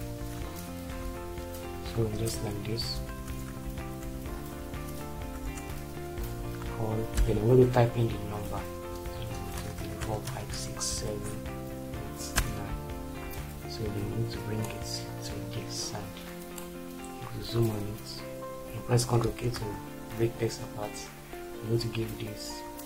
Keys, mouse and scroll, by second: 0.7-1.8 typing, 2.9 BackSpace, 4.0 shift+l, 5.1 BackSpace, 6.2 l, 7.4-10.8 typing, 12.4 typing, 13.0 ctrl+space, 19.2 ctrl+k.